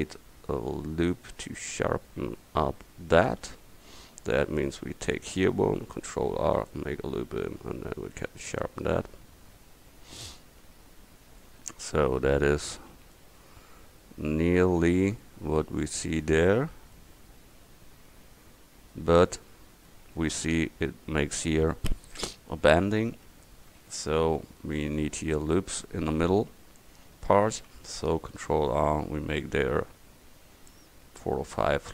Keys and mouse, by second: 1.3 middle click, 3.5-6.2 middle drag, 6.2 ctrl+r, 10.7 Tab, 18.2 middle click, 18.5 middle drag, 18.9 drag, 19.1 drag, 23.4 Tab, 26.3 KP_1, 28.2 ctrl+r.